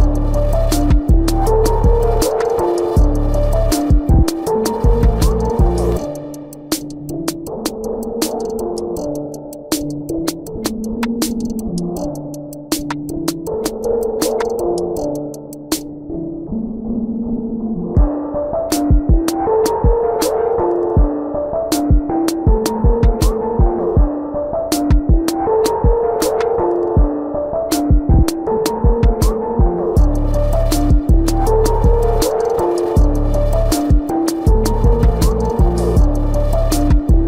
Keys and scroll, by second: 7.3 space, 8.2 ctrl+=, 13.2 space, 14.0 ctrl+=, 16.1 ctrl+=, 17.7 ctrl+alt+z, 26.3 ctrl+alt+z, 28.1 space, 28.7 ctrl+=, 36.1 ctrl+=.